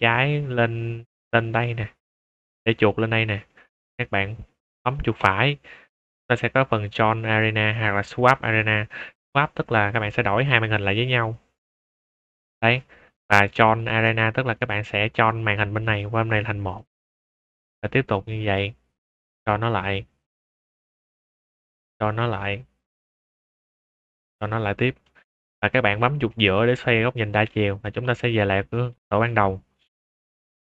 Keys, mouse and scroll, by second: 5.1 right click, 11.1 right click, 11.8 click, 13.6 right click, 14.4 click, 16.6 click, 18.4 right click, 19.0 click, 19.6 click, 20.6 right click, 21.1 click, 21.7 click, 22.9 right click, 23.4 click, 24.0 click, 25.0 shift+middle drag, 26.6-27.4 middle drag, 27.6 shift+middle drag, 28.1 scroll down 2, 28.5-28.8 middle drag, 29.1 shift+middle click, 29.4 scroll up 2, 29.9-30.4 middle drag, 30.6 shift+middle drag.